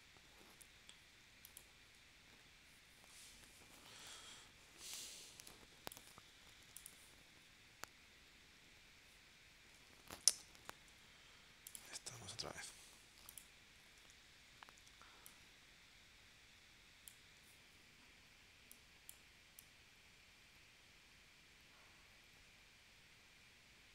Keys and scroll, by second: 10.0 super+z, 10.9 v, 12.5 super+2, 14.0-15.1 typing.